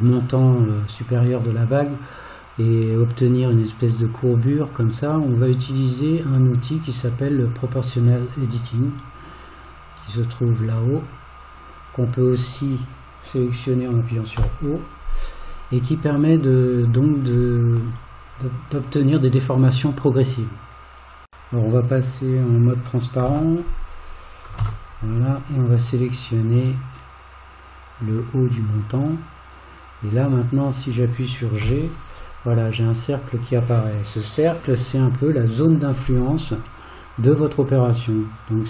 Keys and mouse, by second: 10.7 click, 11.9 click, 14.4 o, 24.2 click, 24.6 alt+z, 26.9-28.1 drag, 31.7 g.